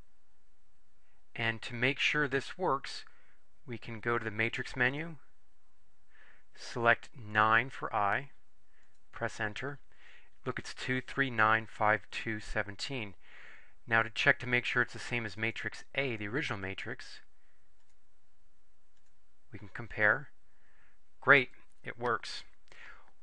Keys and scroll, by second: 7.4 9, 8.9 Return, 17.9 Return, 19.1 Return.